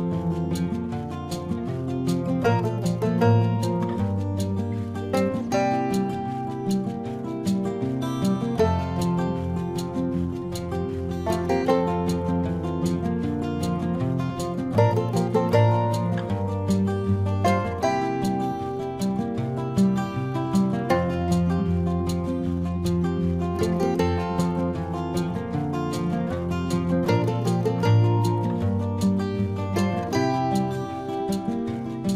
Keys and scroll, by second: 20.3 ], 26.5 ctrl+-.